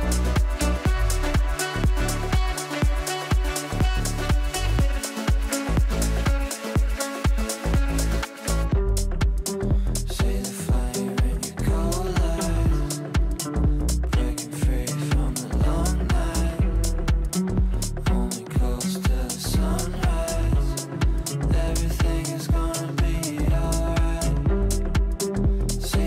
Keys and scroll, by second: 24.2 ctrl+z.